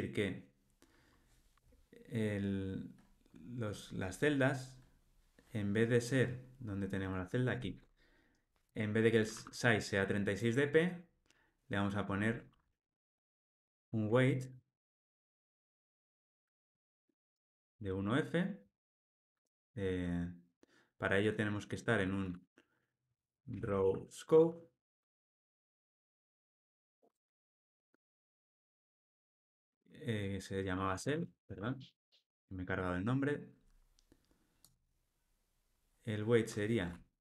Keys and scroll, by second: 14.6 Return, 15.5 Escape, 17.7 alt+Return, 25.1 Tab, 25.7 Escape.